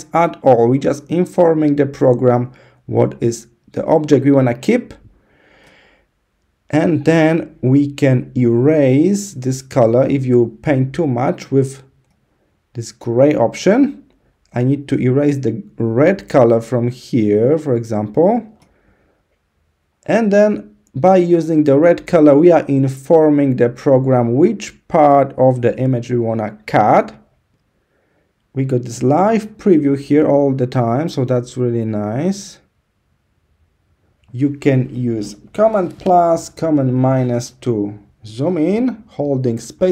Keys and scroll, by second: 36.2 super+=, 36.5 super+-, 36.9 super+=.